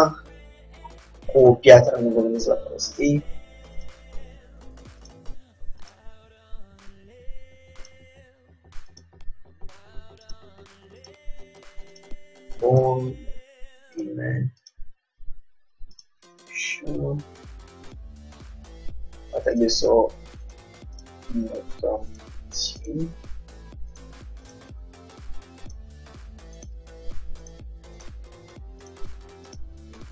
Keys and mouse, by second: 3.9-5.8 drag, 4.2 g, 6.0-7.7 drag, 6.4 g, 9.0-11.0 drag, 9.3 g, 11.1-16.7 drag, 11.3 g, 13.1 g, 15.1 g, 19.6-26.4 drag, 19.8 g, 21.3 g, 23.2 g, 24.8 g, 26.4 middle click, 26.7-30.1 drag, 26.8 g, 28.2 g, 29.7 g.